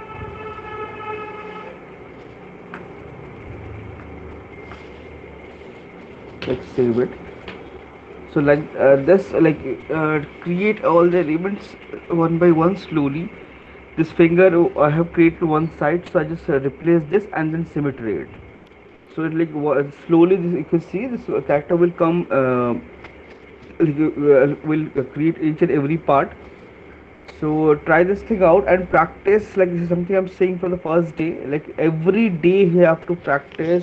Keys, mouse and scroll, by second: 0.4 right click, 0.7 alt+click, 1.1 click, 3.1 alt+click, 3.8 click, 5.6 9, 8.6-9.3 alt+click.